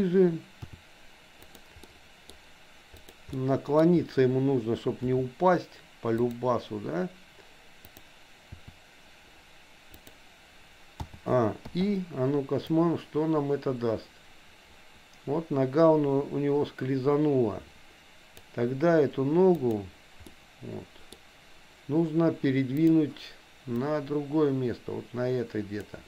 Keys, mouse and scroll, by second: 0.7 r, 1.9 middle click, 2.9 click, 3.3 middle click, 5.2 r, 7.9 click, 8.5 r, 11.0 a, 11.8 i, 12.8-18.5 drag, 19.5 click, 20.3 middle click, 22.8 click, 23.7-25.9 drag.